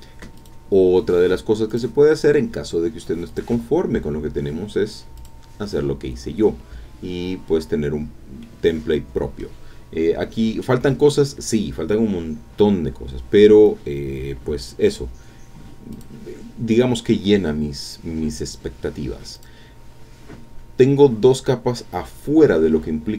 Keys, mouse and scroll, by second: 0.4 click, 1.7 click, 3.3 click, 5.2 click, 8.4-9.6 middle drag, 9.9-10.5 scroll down 4, 15.9 click, 18.1-18.5 scroll up 3, 18.5-18.8 scroll down 1, 19.3 click, 20.4 scroll down 2, 21.7-22.3 scroll up 2, 22.9-23.1 scroll down 4.